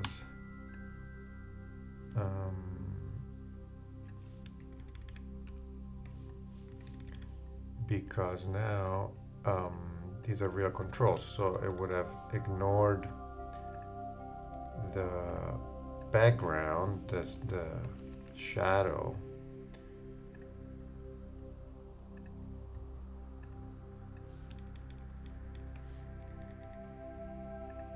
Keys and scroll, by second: 4.6 shift+Right, 6.7 shift+Right, 11.3 shift+Down, 17.3 shift+Left, 24.6 shift+Up.